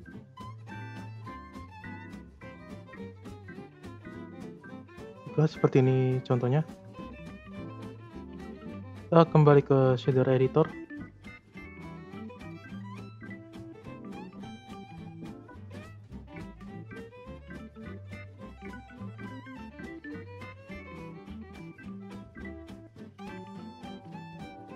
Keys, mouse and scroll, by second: 3.2 click, 4.2-4.6 shift+middle drag, 4.6 scroll up 4, 4.9-6.9 middle drag, 6.9 scroll up 1, 7.0 click, 8.2 scroll up 2, 8.4-9.9 middle drag, 9.9-10.6 scroll up 1, 10.6-11.0 middle drag, 11.0-11.6 scroll up 4, 11.6 middle click, 12.0-12.4 scroll up 2, 12.4 scroll down 3, 12.6-15.6 middle drag, 16.5-16.8 middle drag, 16.8-17.2 scroll up 3, 17.6 click, 19.2 middle click, 20.1-20.5 scroll up 3, 20.5 scroll down 2, 20.7-22.1 middle drag, 22.1 scroll up 4, 23.3 middle click, 23.7-24.4 scroll up 5, 24.4-24.7 middle drag.